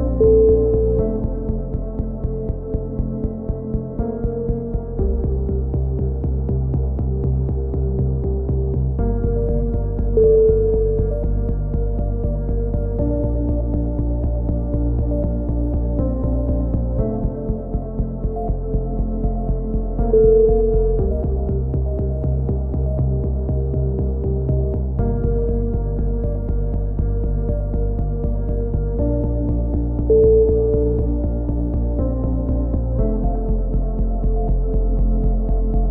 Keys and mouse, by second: 0.2-0.6 drag, 0.6 KP_1, 0.7 middle click, 1.0-1.7 drag, 1.7-2.8 middle drag, 1.7 z, 2.2 c, 3.3-7.2 drag, 7.2 a, 7.4 c, 7.8-9.4 drag, 9.4 a, 9.5 c, 11.4 a, 12.1 c, 12.5 click, 13.9 a, 14.2 c, 14.9 click, 15.9 a, 16.2 c, 16.7 click, 17.5 a, 18.4 c, 19.0-19.5 drag, 20.5 a, 21.3 c, 22.0-23.4 drag, 23.4 a, 23.6 c, 24.4-26.6 drag, 26.6 a, 26.9 c, 27.5 click, 28.7 a, 29.1 c, 30.6 a, 30.9 c.